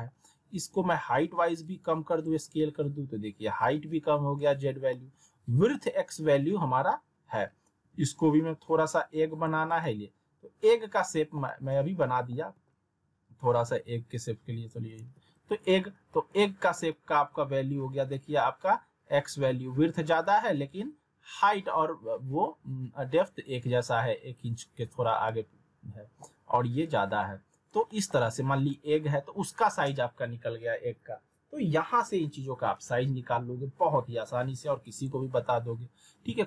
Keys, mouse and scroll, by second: 0.8 r, 1.6-2.5 click, 2.2 w, 4.9-5.8 alt+middle drag, 7.8 r, 8.8-9.5 click, 9.5 w, 9.8-11.0 alt+middle drag, 12.3 alt+w, 13.4 r, 14.1-14.8 click, 14.7 w, 16.1-16.7 alt+middle drag, 24.4-24.8 scroll up 2, 24.8 z, 25.3-25.9 alt+middle drag, 27.6 scroll down 1, 27.9 alt+middle click, 28.2 w, 28.7-32.1 middle drag, 35.0 click.